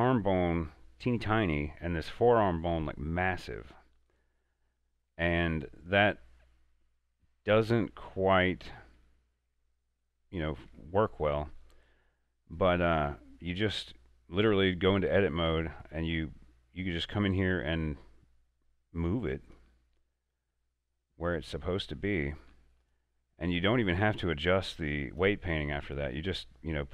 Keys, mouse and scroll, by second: 1.0 scroll down 1, 1.3-1.6 scroll up 1, 1.6 middle click, 2.4 right click, 2.9-5.2 middle drag, 5.2 Tab, 6.2-6.7 scroll down 1, 6.7-9.1 middle drag, 9.1 Tab, 10.1 middle click, 10.8 Tab, 11.2-14.8 middle drag, 15.9 middle click, 16.0 right click, 17.5-20.4 drag, 20.4 right click, 21.2-22.9 drag, 22.9 right click, 23.6-26.0 drag, 26.0 right click, 26.7 click.